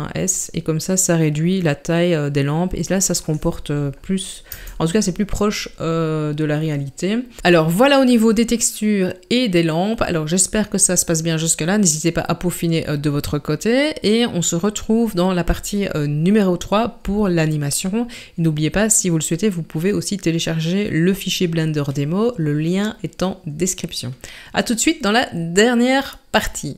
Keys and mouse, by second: 4.5 Tab.